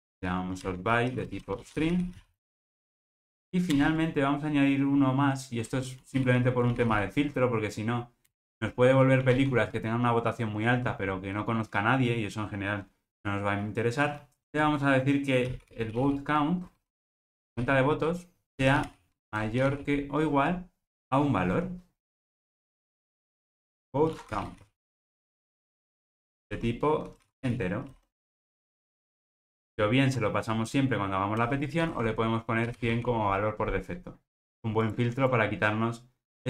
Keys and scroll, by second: 29.6 alt+super+l.